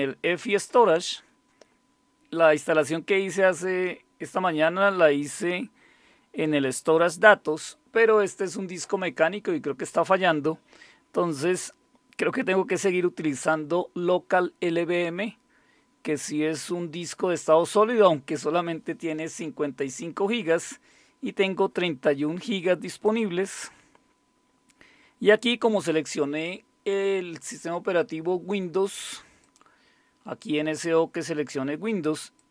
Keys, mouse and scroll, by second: 0.5 click, 22.9 click, 29.4 click, 32.4 click.